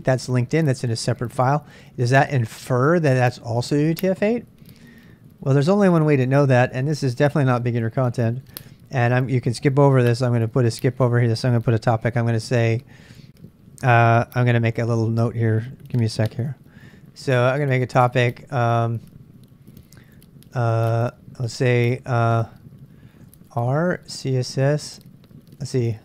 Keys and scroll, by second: 15.7 ctrl+a, 16.2 typing, 17.6-18.6 typing, 19.7-20.5 typing, 21.5 typing, 23.2-26.0 typing.